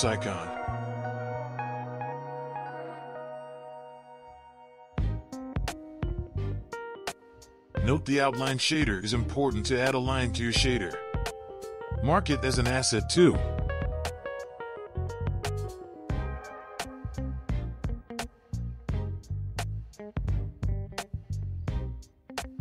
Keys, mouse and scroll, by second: 0.4 click, 2.3 click, 4.4-7.4 right drag, 8.9 click, 10.9-13.9 right drag, 18.8 click.